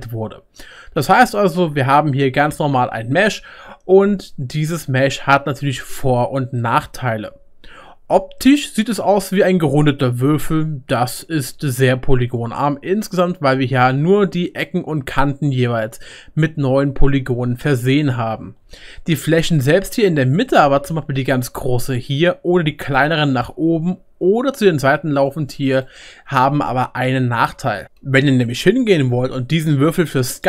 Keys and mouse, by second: 9.0 Tab, 11.3-14.3 middle drag, 13.8-14.1 right drag, 14.1 right drag, 16.4 Tab, 18.6-21.8 shift+middle drag, 18.6-21.8 shift+right drag, 20.9 3, 21.2 click, 22.9 click, 23.4 click, 24.4-30.4 right drag, 24.5 click.